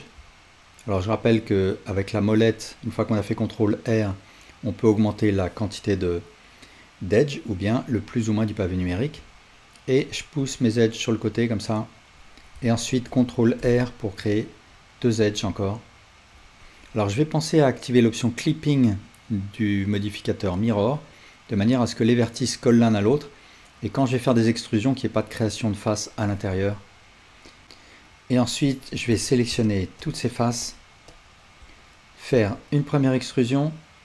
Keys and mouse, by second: 0.7 alt+middle click, 0.8-9.7 alt+drag, 9.7 alt+middle click, 9.8-18.7 alt+drag, 12.9 ctrl+r, 27.6 ctrl+z, 27.6-29.7 drag, 29.1 ctrl+z, 30.0 click, 31.1 click, 32.4 e.